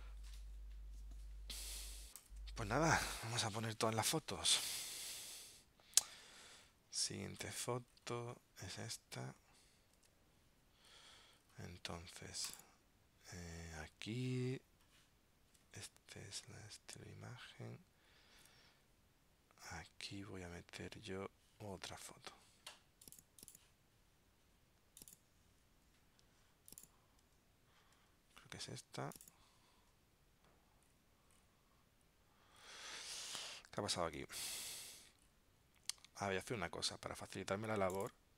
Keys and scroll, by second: 2.3 ctrl+alt+super+p, 5.3 super+Tab, 10.1 super+Tab, 34.3 super+z.